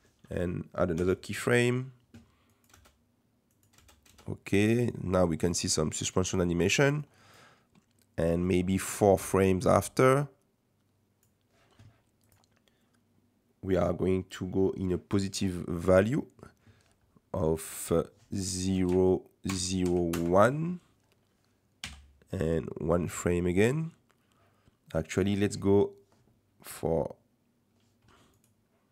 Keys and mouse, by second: 0.0-1.5 drag, 1.0 i, 2.5 click, 2.8 space, 3.5 click, 3.8 space, 4.1 space, 4.6 space, 4.9 click, 6.2 space, 7.0 click, 8.4-11.2 drag, 17.8-20.8 drag, 21.8 i, 25.1-28.5 drag.